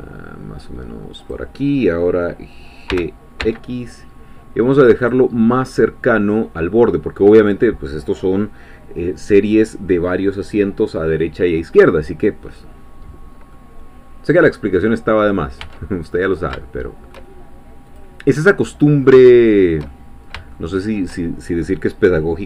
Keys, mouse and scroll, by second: 1.2 click, 2.9 g, 3.4 x, 5.0 click, 5.4 scroll down 1, 5.7-7.5 middle drag, 13.5-15.0 middle drag, 15.1-15.6 scroll up 2, 15.6 Tab, 15.9-17.7 middle drag, 18.0 click, 18.4-19.9 middle drag, 21.2 shift+middle click.